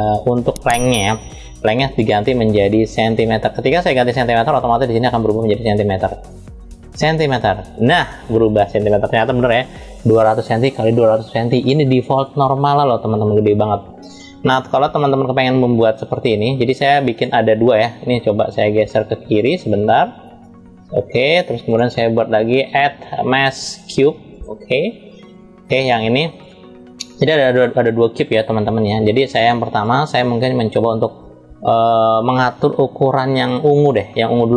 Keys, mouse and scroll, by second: 1.2-4.0 drag, 5.9-7.1 drag, 11.8 click, 12.4 click, 13.7 click, 16.8 click, 19.0 click, 20.1-21.2 drag, 21.5 click, 22.3-24.2 drag, 24.9 scroll up 1, 25.6 click, 26.2 click, 27.2 drag, 29.0 drag, 29.6 click.